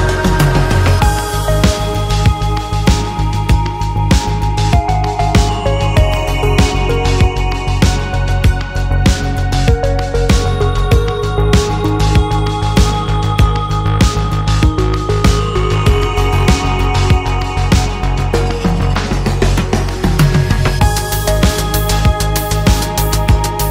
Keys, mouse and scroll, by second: 0.5 middle click, 1.0-1.7 scroll up 1, 1.7 click, 2.0-2.7 scroll up 1, 2.7 click, 5.0 click, 7.3-8.9 drag, 9.7 click, 11.7-12.9 drag, 14.3 click, 14.7 click, 15.6 click, 17.0 click, 18.0 click, 20.0 click, 21.5-23.1 typing.